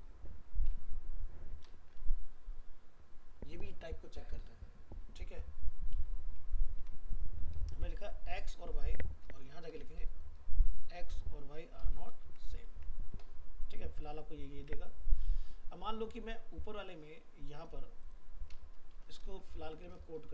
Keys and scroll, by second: 6.3 ctrl+s, 12.2 ctrl+s, 12.8 alt+Tab.